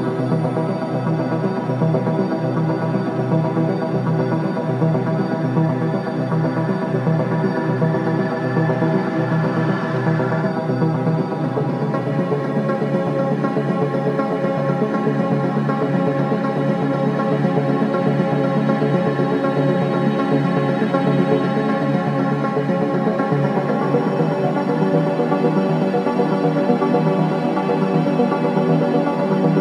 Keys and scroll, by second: 2.8 ctrl+KP_0, 3.3 space, 7.1 m, 10.3 v, 11.0 3, 12.2 ], 13.0 KP_3.